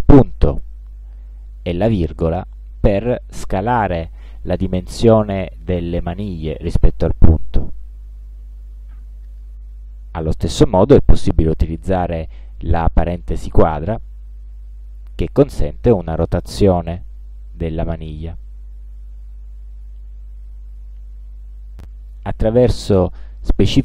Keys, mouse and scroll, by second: 2.6 ,.